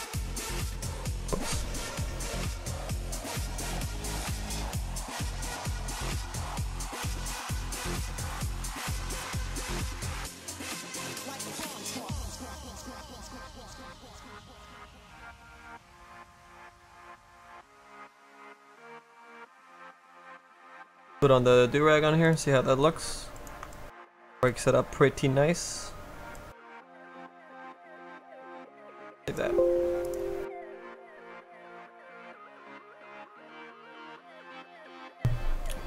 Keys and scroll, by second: 1.3 z.